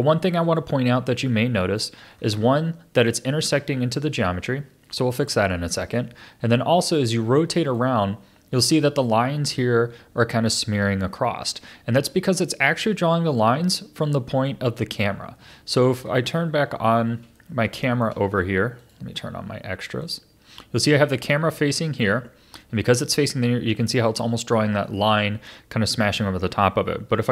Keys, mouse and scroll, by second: 2.1-3.0 scroll up 5, 4.3-5.4 scroll down 4, 6.0-9.0 middle drag, 10.8-11.9 scroll down 5, 11.9-16.0 middle drag, 16.0-16.8 scroll up 1, 16.8-17.3 scroll down 5, 17.3-18.8 shift+middle drag, 18.8-21.2 drag, 21.2-25.9 middle drag, 27.1 KP_0.